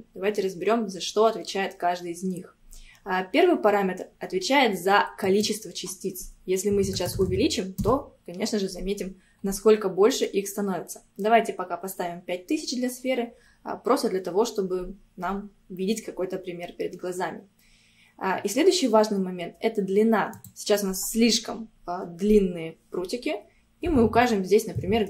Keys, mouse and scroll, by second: 5.3-7.2 drag, 7.2 KP_0, 7.3 KP_0, 9.1 scroll down 2, 10.1-10.7 scroll up 4, 20.4-23.6 drag.